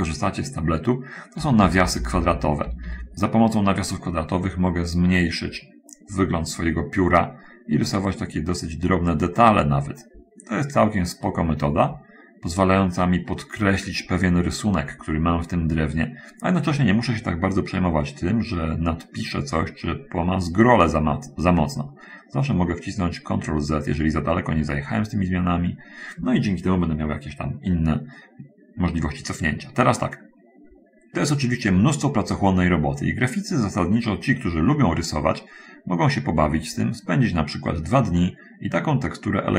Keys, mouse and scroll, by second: 1.8 [, 2.0 [, 5.1 middle click, 7.3-16.8 drag, 17.7-21.1 drag, 21.8-26.2 drag, 27.3 scroll down 1, 28.0-28.4 scroll down 1, 29.0-29.9 scroll down 1, 29.9 middle click, 30.3 scroll up 1, 33.0-35.1 drag, 36.0-37.7 drag, 38.1-39.5 drag.